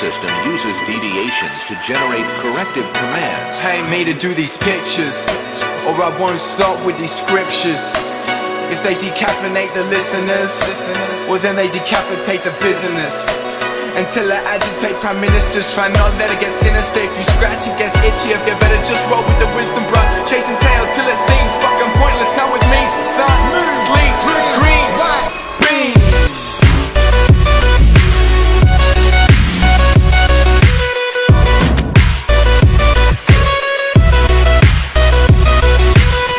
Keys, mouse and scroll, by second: 0.5 right click, 1.5 click, 2.0-3.5 typing, 4.0 Return, 4.7-10.7 drag, 10.7 F10, 11.1-14.7 drag, 15.4 g, 18.4 typing, 22.6-23.7 typing, 25.9 typing, 27.8-29.0 typing, 30.6 g, 34.7 click, 34.8 F10, 35.1-36.3 drag.